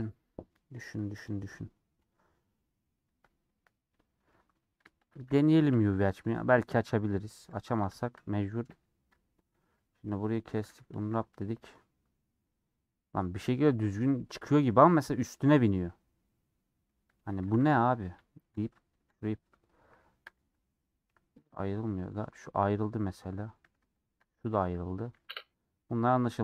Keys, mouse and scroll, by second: 0.3 scroll up 1, 1.2 click, 3.0 KP_Decimal, 3.8-4.9 middle drag, 4.9 shift+click, 5.6 /, 6.9 /, 7.5 click, 8.6 /, 9.2 Tab, 9.5 middle click, 10.0 scroll down 1, 10.2 middle click, 10.6 a, 11.3 middle click, 12.1-12.6 scroll up 1, 12.6 scroll up 1, 12.8-17.6 middle drag, 17.6 a, 18.7 p, 18.8 Tab, 19.0-20.3 drag, 20.3 g, 21.4 click, 22.6-24.0 middle drag, 24.0 shift+click, 24.3 g, 25.7 /, 26.1 /.